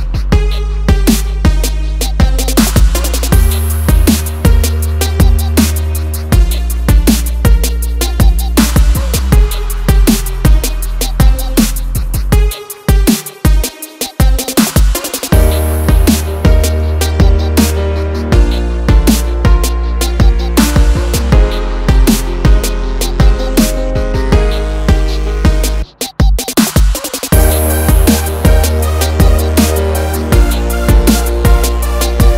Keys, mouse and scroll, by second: 0.4 scroll up 1, 2.1 ctrl+click, 3.8 ctrl+click, 8.5 click, 9.7 scroll up 1, 10.1 ctrl+click, 10.7 ctrl+click, 12.6 right click, 13.4 scroll down 1, 14.2 scroll up 1, 15.3 click, 15.8 scroll down 1, 16.5 click, 17.4 ctrl+click, 18.1 ctrl+click, 19.1 click, 21.0 right click, 21.3 click, 22.6-23.0 scroll up 1, 23.0 scroll down 1, 24.0 click, 25.9 F4, 28.0 F9, 31.4 F9, 31.8 click.